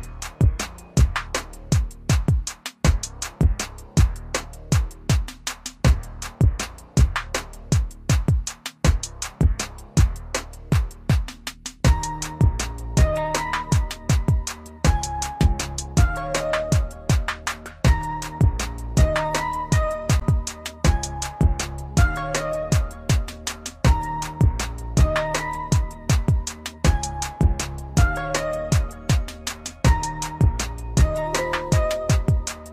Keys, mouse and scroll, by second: 4.2 click, 9.5 click, 14.0 click, 19.1 ctrl+Num_Lock, 20.0 ctrl+shift+s, 21.5 click, 30.7 Left, 31.0-32.0 typing.